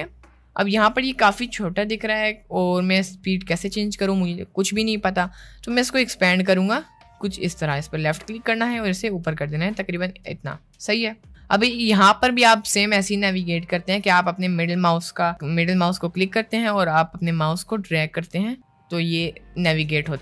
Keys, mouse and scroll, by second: 7.0-10.0 drag, 10.5 middle click, 16.3-20.2 middle drag.